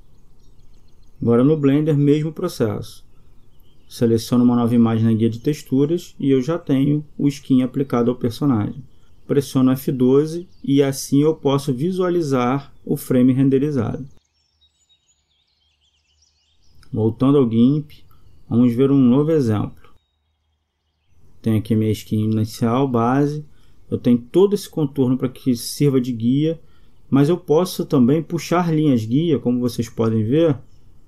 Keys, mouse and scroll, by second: 2.8-4.1 middle drag, 4.1 click, 6.0-7.4 drag, 14.7 Escape.